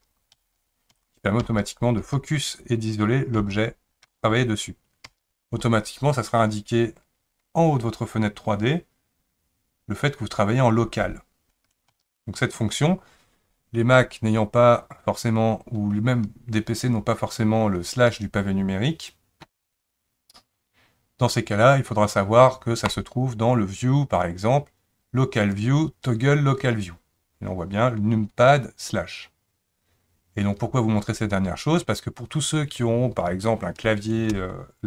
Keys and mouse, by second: 0.3 KP_Divide, 0.9 KP_Divide, 1.4 KP_Divide, 2.0 KP_Divide, 3.3 KP_Divide, 4.0 KP_Divide, 5.0 KP_Divide, 11.9 KP_Divide, 23.0-30.7 drag.